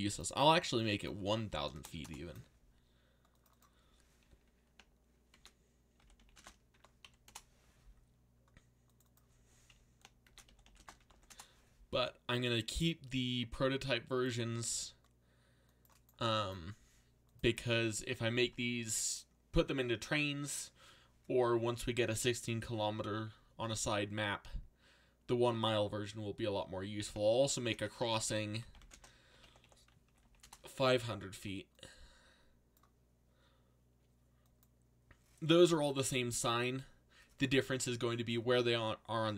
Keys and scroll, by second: 1.7 BackSpace, 1.9 1, 2.0 Return, 5.3-7.0 typing, 7.2 Return, 10.0-11.5 typing, 27.3-30.7 typing.